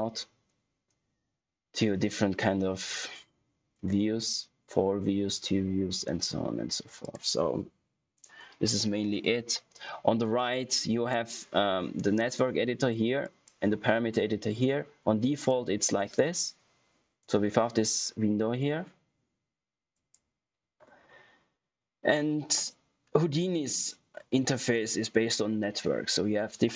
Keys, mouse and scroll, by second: 6.9 click, 10.7 click, 15.3 click, 19.9 click.